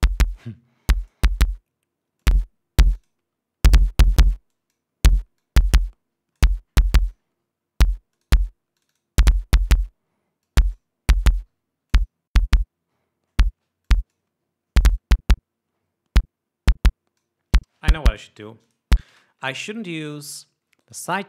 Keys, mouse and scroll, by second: 1.6-2.7 drag, 2.9 click, 3.4 click, 5.1 click, 6.0-7.2 drag, 7.6 click, 8.9 click, 9.4 click, 11.0 click, 12.5 click, 14.4-14.9 drag, 15.4-17.9 drag, 19.2-20.2 drag, 20.2 space.